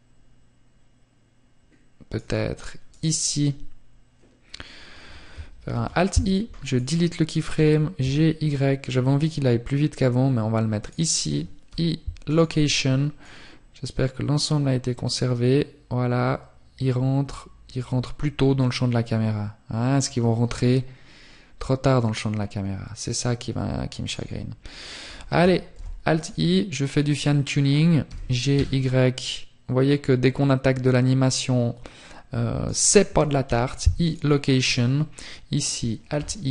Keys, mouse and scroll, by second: 11.4 click, 31.7 click, 31.7 i, 32.9 right click.